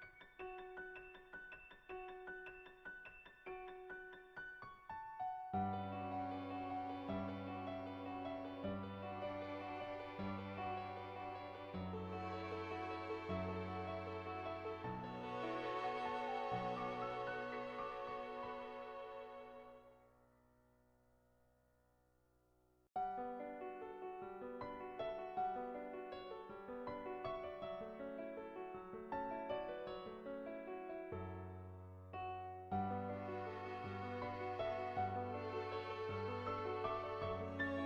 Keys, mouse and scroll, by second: 0.9-3.1 drag, 8.6-9.9 drag, 9.9 Tab, 10.6 click, 11.6 ctrl+z, 16.9 click, 17.8-21.2 drag, 24.2 click, 25.8 click, 26.8 ctrl+z, 27.5 click, 28.2 click, 29.3 click, 30.3 click, 32.0 middle click, 34.2 click, 34.6 click, 37.2-37.8 drag.